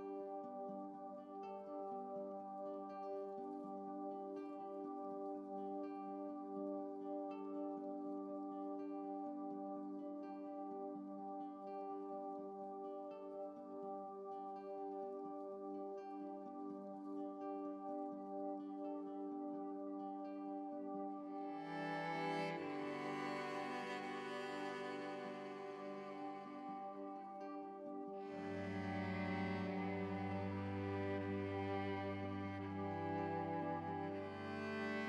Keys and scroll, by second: 6.0 ctrl+u, 20.7 ctrl+z, 28.3 ctrl+z.